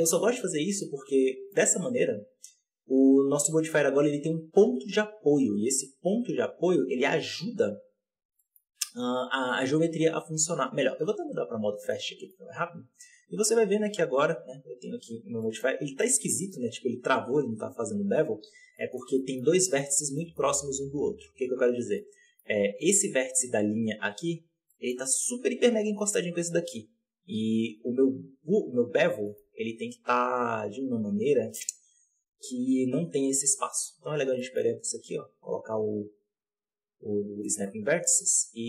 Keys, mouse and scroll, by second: 0.3 right click, 0.7-1.6 middle drag, 1.6 scroll up 1, 1.9 right click, 5.9-7.3 scroll up 4, 7.3 KP_7, 8.0-8.3 scroll down 1, 8.3-8.6 shift+middle drag, 8.6-10.7 scroll up 1, 10.7-11.1 scroll up 2, 11.1 click, 11.8-12.7 middle drag, 12.7 right click, 13.2 g, 15.0 scroll down 4, 15.3 middle click, 15.6 scroll up 4, 15.9-17.8 shift+middle drag, 17.8-18.7 drag, 18.7 middle click, 19.5 scroll up 3, 19.7-20.4 middle drag, 20.4-21.0 scroll up 1, 21.0 right click, 21.4 Tab, 22.0-24.2 middle drag, 24.2-24.6 scroll up 1, 24.6 shift+middle drag, 24.9-25.9 scroll up 10, 25.9-26.7 scroll up 1, 26.7 KP_7, 27.7 z, 27.9-29.2 scroll down 22, 29.2 shift+middle click, 29.3 scroll up 4, 29.5 Tab, 29.6-30.4 scroll down 14, 30.9 Tab, 31.6 click, 31.8-32.9 scroll down 2, 32.9 b, 33.1-36.1 scroll up 20, 33.6 shift+middle click, 34.3 shift+middle click, 37.1 scroll down 1, 37.3 shift+middle drag, 37.6-38.0 scroll up 3, 38.0 g.